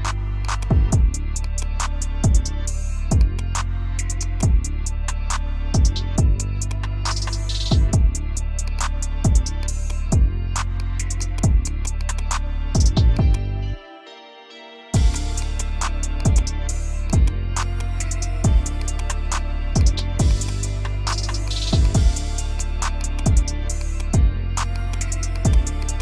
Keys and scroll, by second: 9.7 space, 19.0 Escape.